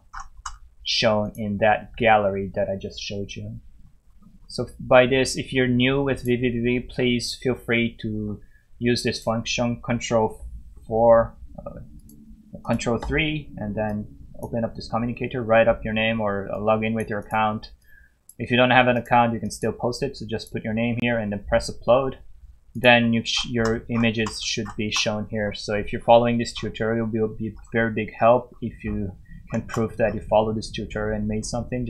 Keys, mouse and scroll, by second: 0.1 scroll up 1, 1.2 click, 3.7 scroll down 1, 6.2 click, 8.1 scroll up 1, 9.1 click, 10.7 4, 12.0 click, 12.9 ctrl+3, 13.9 click, 23.3 scroll up 1, 25.4 scroll down 1, 26.0-26.7 scroll down 2, 28.3 scroll up 1, 28.8 scroll down 1, 29.4 scroll up 1, 30.0 scroll down 1.